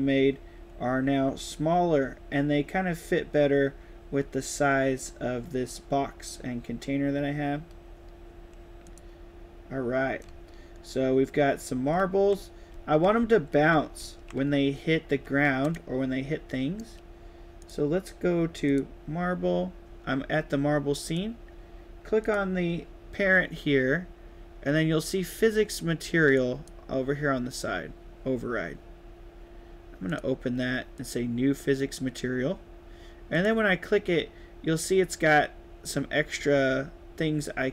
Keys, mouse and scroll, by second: 8.7 click, 10.1 right click, 10.3 a, 11.6-14.4 typing, 15.5-16.7 right drag, 17.5 click, 18.6 click, 20.9 click, 22.1 click, 26.3 right click, 30.0 click, 30.9 click, 33.2 click.